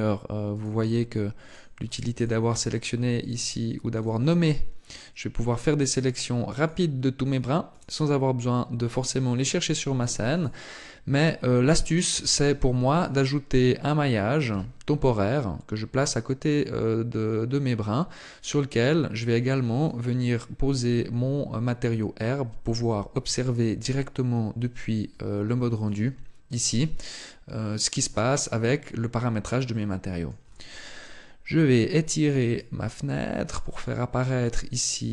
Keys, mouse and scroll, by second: 0.2 right click, 1.2 click, 1.6 click, 2.0 click, 2.2 click, 2.9 click, 5.2 click, 6.3 click, 7.0 click, 9.3 right click, 9.7 right click, 10.0 right click, 11.8 shift+a, 14.2 g, 17.9 click, 19.0 click, 25.6 click, 27.6-28.3 scroll up 3, 28.9 shift+middle click, 32.2 click.